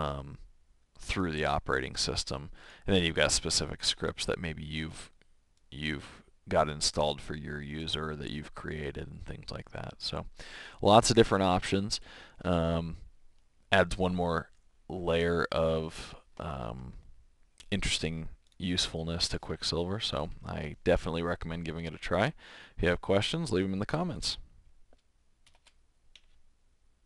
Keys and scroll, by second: 25.4 shift+super+Return.